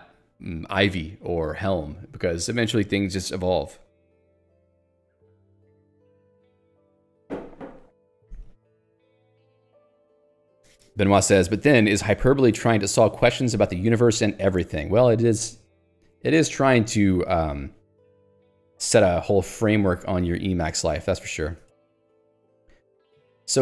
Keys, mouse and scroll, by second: 16.4 click, 16.5 Escape, 21.5 ctrl+click, 22.0 Escape.